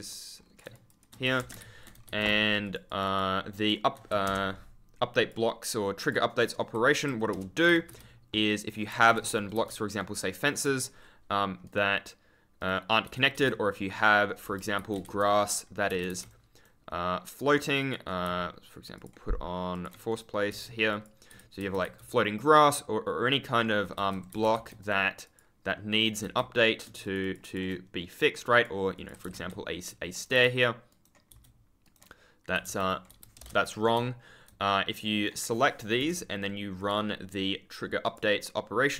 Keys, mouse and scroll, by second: 0.0 ctrl+click, 0.3-0.6 scroll up 1, 1.2 shift+a, 1.5 ctrl+w, 1.9 scroll down 1, 2.0 e, 2.6 shift+click, 4.0 Escape, 5.1 click, 6.7 Escape, 7.8 e, 9.0 Escape, 9.3 right click, 9.5 space, 9.9 right click, 11.3 scroll down 1, 11.6 right click, 13.0 d, 13.1 scroll up 1, 13.2 e, 15.0 s, 15.9 Escape, 16.3 right click, 17.7 click, 18.9 super+click, 20.0 right click, 20.4 s, 20.8 click, 21.2 s, 24.0-25.0 typing, 24.7 right click, 25.2 click, 25.7 scroll down 1, 25.9 scroll up 1, 26.1 e, 26.9 shift+click, 27.9-28.4 scroll down 1, 28.4 click, 29.0 Escape, 29.1 3, 29.4 a, 30.0 right click, 30.2 a, 30.8 right click, 31.2 d, 31.5 scroll up 1, 31.7 right click, 32.4 scroll down 1, 32.6 d, 33.1 space, 34.6 right click, 35.4-35.8 scroll down 1, 35.9 Return, 36.7 click, 38.0 click.